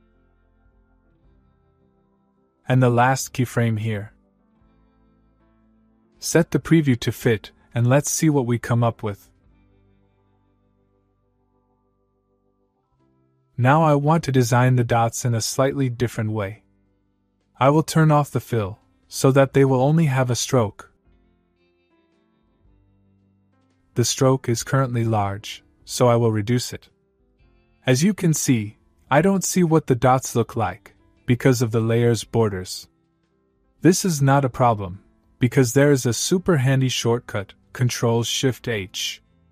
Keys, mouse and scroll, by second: 1.4 click, 2.9 Left, 5.0 scroll down 1, 5.3-6.1 middle click, 6.5 click, 9.4 space, 12.2 space, 12.8 click, 15.2 click, 16.0 shift+click, 18.8 click, 20.6 Return, 21.4 click, 23.2 Return, 23.8-24.8 scroll up 1, 25.7-26.5 click, 26.9-27.3 scroll down 1, 38.0 h.